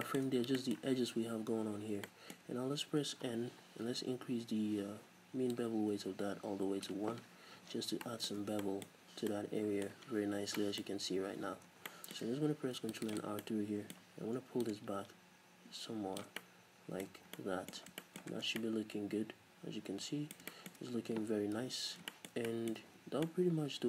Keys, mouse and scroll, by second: 0.3 scroll up 2, 1.8 scroll down 2, 3.1 n, 5.5-8.0 drag, 7.5 z, 8.0-13.3 middle drag, 8.5 Tab, 8.9-9.9 scroll up 2, 10.1-10.6 scroll down 2, 11.2-11.7 scroll up 2, 11.7 Tab, 12.6 ctrl+r, 13.3 right click, 13.4-14.8 middle drag, 14.8-16.4 drag, 16.4-23.8 middle drag, 17.1 scroll up 2, 17.8 scroll down 2, 18.5 Tab, 21.6 n, 21.7-22.1 scroll up 2, 22.8 a.